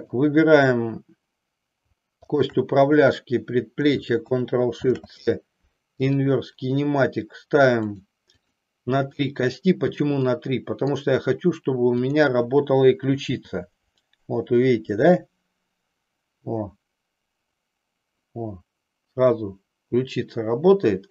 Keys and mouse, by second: 0.0-1.2 drag, 7.8 click, 8.5 click, 9.2 click, 10.4 middle click, 11.8-13.2 drag, 13.5 g.